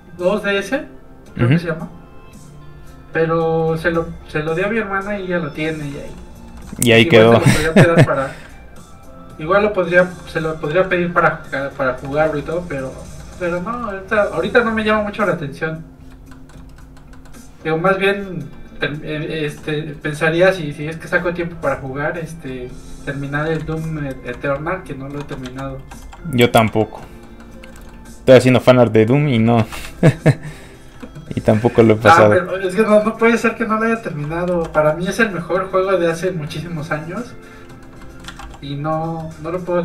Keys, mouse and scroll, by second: 0.5 click, 0.6 click, 3.6 f, 3.7 click, 5.6 middle click, 5.9 shift+middle click, 6.7 middle click, 6.8 middle click, 7.3 scroll up 1, 7.4 middle click, 9.0 click, 10.7 ctrl+f, 10.8 click, 11.1 ctrl+click, 11.9 scroll down 1, 12.1 shift+middle click, 12.4 middle click, 13.5 middle click, 13.7 shift+middle click, 16.1 click, 16.3 shift+middle click, 16.8 middle click, 16.9 middle click, 21.8 shift+click, 21.9 click, 22.7 shift+click, 23.1 shift+click, 23.8 ctrl+shift+z, 24.5 shift+z, 24.6 shift+click, 25.4 ctrl+shift+z, 26.0 f, 26.1 click, 26.6 f, 26.8 click, 27.0 middle click, 27.7 shift+middle click, 28.3 middle click, 28.4 click, 29.6 ctrl+z, 30.0 shift+click, 30.2 shift+click, 30.5 shift+click, 31.0 click, 31.1 middle click, 31.3 f, 31.4 click, 32.0 click, 33.0 middle click, 33.3 f, 33.5 click, 34.5 ctrl+z, 34.9 click, 34.9 f, 36.2 middle click, 36.6 f, 36.7 click, 37.7 middle click, 38.2 ctrl+z, 38.4 click, 39.2 middle click.